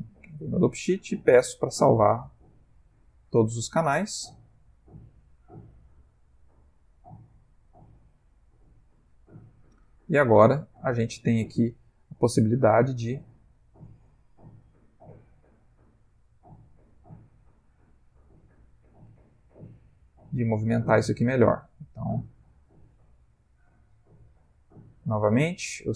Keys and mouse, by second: 0.3 i, 1.9 click, 10.7 Left, 11.2 Right, 13.1 click, 13.7 g, 15.8 s, 18.9 g, 24.9 i.